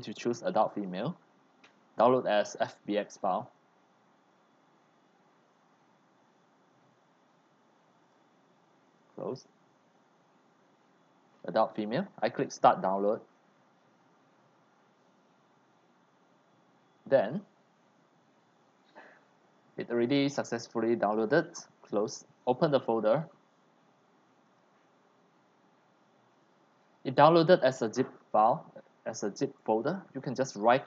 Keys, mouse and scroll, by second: 3.4 click, 8.0 click, 8.9 click, 12.5 click, 21.1 click, 24.4 click, 26.1 click.